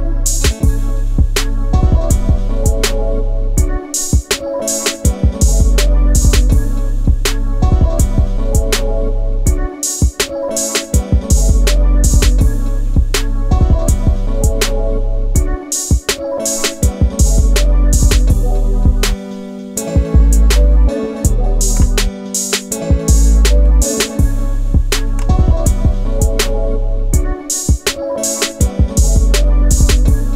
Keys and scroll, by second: 20.5-21.9 ctrl+space, 23.7 space.